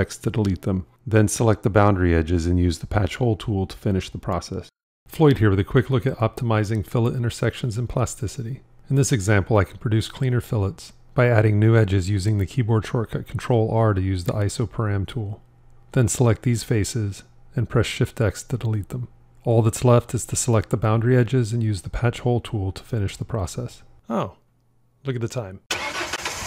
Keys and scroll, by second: 0.3 shift+x, 10.2 ctrl+r, 18.1 shift+x.